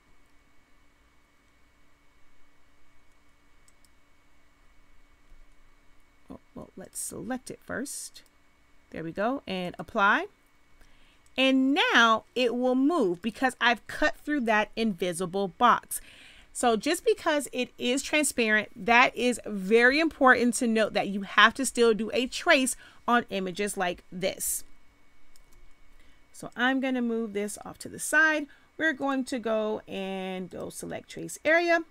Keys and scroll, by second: 24.4 space.